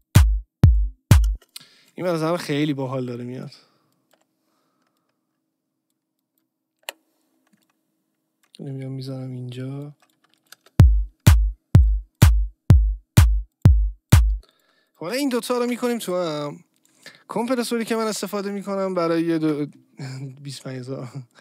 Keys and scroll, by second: 1.3 space, 2.3 Delete, 4.1 Delete, 6.8 Delete, 10.5 space, 14.3 space, 15.6 ctrl+g, 19.4 BackSpace.